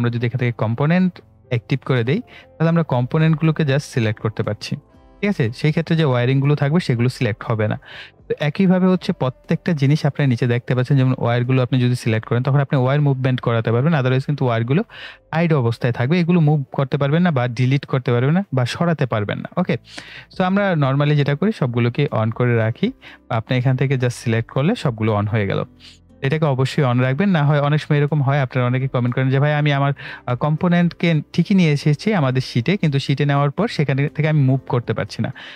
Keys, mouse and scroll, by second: 8.7 click.